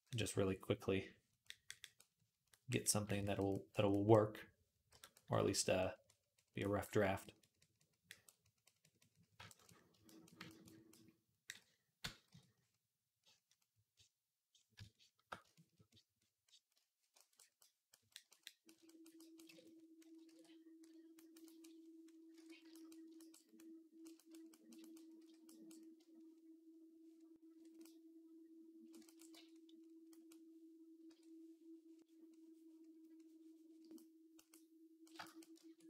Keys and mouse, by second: 1.7 click, 2.4-19.9 drag, 4.9 j, 12.1 x, 19.3 ctrl+Tab, 19.9-21.9 ctrl+middle drag, 20.1 ctrl+s, 21.9 click, 22.1 ctrl+Tab, 23.1-26.0 middle drag, 25.0 d, 26.0-35.8 ctrl+drag, 29.2 v, 30.9 p.